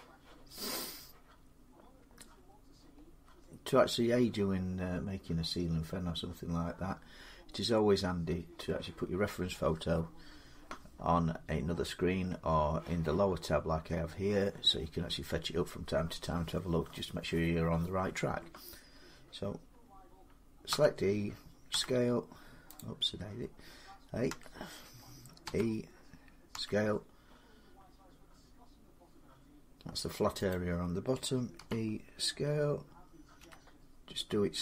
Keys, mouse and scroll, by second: 2.9-3.8 scroll up 5, 3.8-4.4 scroll down 5, 20.5 e, 21.5 s, 22.6 click, 24.1 a, 25.3 e, 26.4 s, 26.6-27.7 drag, 30.3-34.6 drag, 31.4 e, 33.2 s.